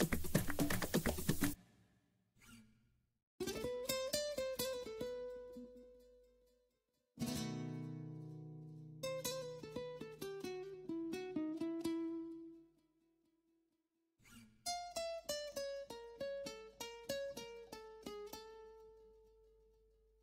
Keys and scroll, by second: 3.9 shift+F12.